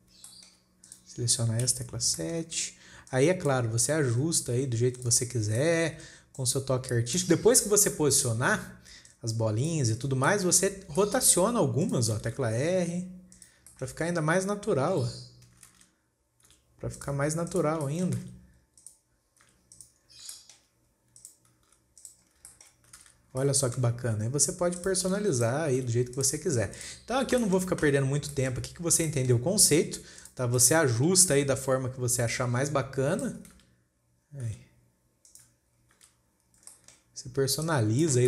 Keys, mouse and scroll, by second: 0.0 alt+a, 0.7 shift+middle click, 1.3 click, 2.1 KP_7, 2.7 shift+middle drag, 3.0 scroll up 2, 3.6 click, 4.3 KP_1, 4.8-5.4 scroll down 5, 5.4 click, 5.8 scroll up 4, 6.1-6.5 shift+middle drag, 6.5 scroll up 4, 6.8 click, 7.6 shift+middle click, 8.0-8.7 scroll down 8, 8.2-8.8 middle drag, 8.7 scroll up 3, 9.5 click, 10.4 scroll down 3, 10.8-11.2 shift+middle drag, 11.2 scroll up 4, 11.5 shift+middle click, 12.3 click, 12.8 r, 14.1 shift+middle click, 14.3-15.4 scroll up 4, 15.4 h, 16.3 ctrl+z, 16.9 g, 17.9 click, 18.3 shift+middle click, 18.7 r, 19.9 g, 20.6 scroll down 4, 20.8-21.6 shift+middle drag, 21.6 click, 22.2 r, 22.8 scroll down 3, 23.1 shift+middle click, 23.5 alt+a, 23.6 scroll up 4, 23.9-25.2 shift+middle drag, 25.2 click, 25.8 click, 26.2 r, 26.9 scroll down 4, 27.2 click, 27.5 scroll down 3, 27.9-29.2 shift+middle drag, 29.2-29.5 scroll up 4, 29.5 shift+middle click, 30.1 scroll up 1, 30.6 click, 31.1-31.7 middle drag, 31.7 KP_7, 32.7 click, 33.9 KP_1, 34.9 r, 36.4 KP_7, 37.0 scroll up 2, 37.2 shift+middle click, 38.1 click.